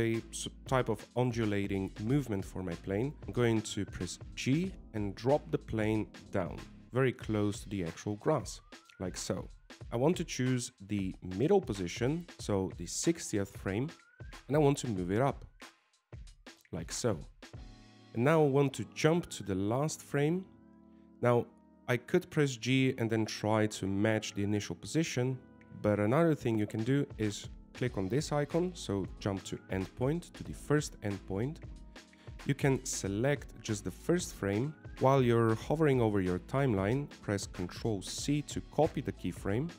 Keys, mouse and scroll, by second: 3.2 shift+middle click, 6.2 g, 9.8 middle click, 9.8 scroll down 2, 10.0 shift+middle click, 10.6 middle click, 11.7 KP_1, 14.4 click, 14.9 shift+middle click, 16.2 g, 20.8 click, 23.4 g, 30.8 click, 33.8 click, 33.9 right click.